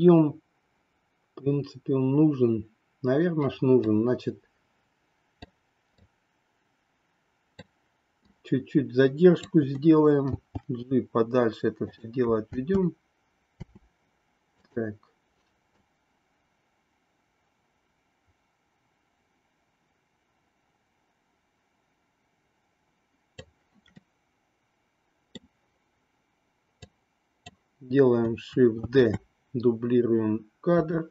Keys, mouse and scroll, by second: 3.8-5.7 drag, 6.0-7.7 drag, 8.2-9.5 drag, 10.3 g, 12.5 space, 14.6 click, 15.8-23.4 drag, 24.0-25.4 middle drag, 26.8 click, 28.8 shift+d.